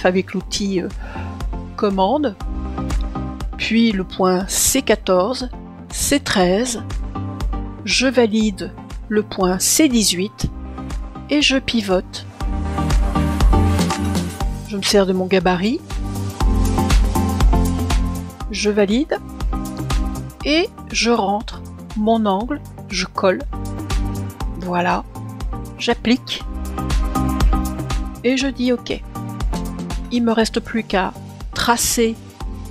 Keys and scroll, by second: 5.4 super+Return.